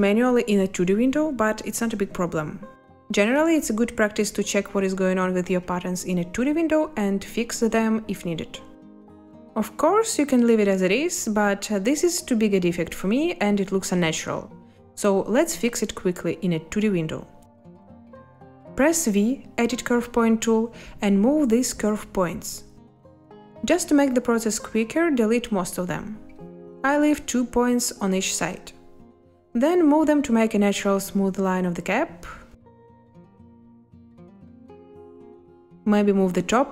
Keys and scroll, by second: 0.9 space, 4.3 z, 9.6 space, 19.1 v, 25.1 Delete, 27.6 Delete.